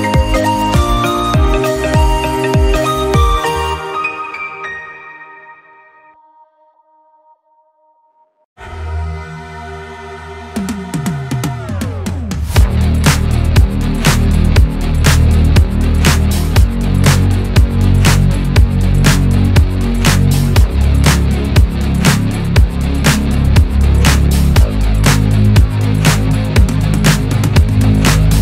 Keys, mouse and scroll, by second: 0.0-0.5 middle drag, 0.5-1.2 scroll up 1, 1.2 scroll up 2, 1.2 g, 2.3 middle click, 2.9 r, 3.8 click, 4.5 click, 4.6 scroll down 3, 4.9-7.8 middle drag, 7.8 KP_7, 8.1-8.5 scroll down 2, 8.5 click, 9.0 g, 9.9-10.5 middle drag, 10.5 click, 11.0 KP_7, 11.6 r, 12.0-13.1 middle drag, 13.1 click, 13.2 scroll down 4, 13.3-14.1 middle drag, 14.1-14.7 scroll up 2, 14.7-15.5 shift+middle drag, 15.5-15.9 scroll up 1, 15.9 click, 16.2 KP_7, 16.5-17.3 scroll down 1, 17.3 shift+d, 18.4 r, 18.9 middle drag, 19.1 scroll up 2, 19.3-20.5 middle drag, 22.8 s, 22.9 click, 23.0 scroll down 3, 23.2-25.4 middle drag, 25.4 click, 25.8-28.4 typing, 26.0 scroll up 2.